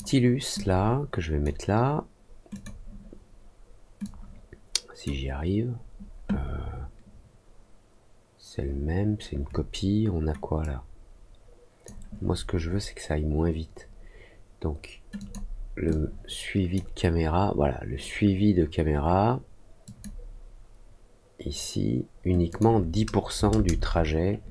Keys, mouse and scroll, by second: 0.5 click, 2.5 click, 4.0-5.0 drag, 10.5-11.8 drag, 15.1 click, 15.8 click, 19.8 click, 22.4 click.